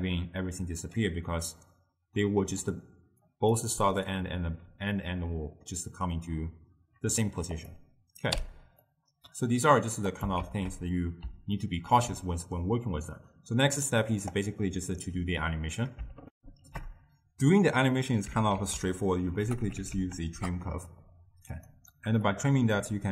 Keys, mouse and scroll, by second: 2.6-3.3 d, 3.4 click, 3.6 d, 3.7 d, 3.9 drag, 4.2-4.6 d, 7.7 click, 8.4 m, 9.0-10.2 middle drag, 10.2 click, 10.6 ctrl+x, 11.7 ctrl+middle click, 12.3-14.1 scroll down 1, 14.1 middle click, 14.3 d, 14.4 right click, 15.2 d, 16.4 ctrl+alt+shift+q, 18.6 ctrl+a, 22.3-23.1 drag.